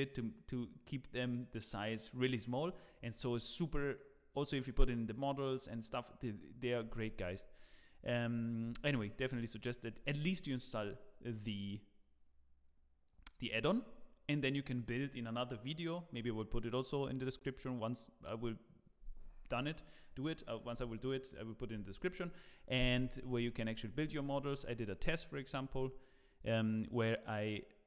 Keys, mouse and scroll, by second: 24.8 click.